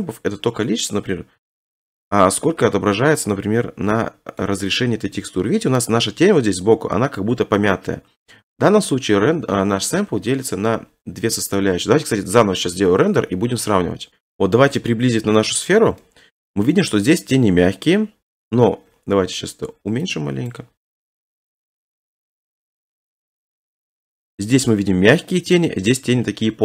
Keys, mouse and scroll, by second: 0.4-1.3 scroll, 2.0-3.1 scroll, 3.3 scroll, 4.4 middle click, 14.1 middle click, 14.2 scroll, 14.3 middle click, 15.5 shift+middle click, 15.7 scroll, 16.7 shift+middle click, 17.1 middle click, 20.5 click, 23.1 click, 24.7 click.